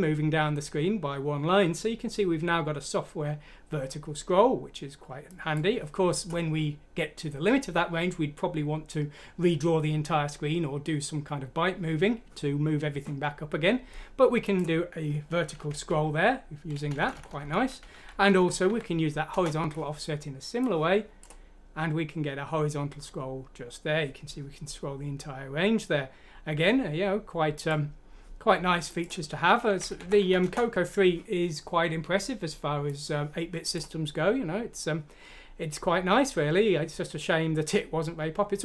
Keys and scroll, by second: 15.6 Home, 15.9 ;, 17.0 Down, 17.3 Home, 17.3 Down, 17.3 ;, 17.4 Down, 17.9 Home, 18.2 Delete, 18.7 F6, 18.7 typing, 19.3 Return, 20.9-21.6 typing, 29.8 Home, 30.0 Delete, 30.2 F6, 30.4 Return.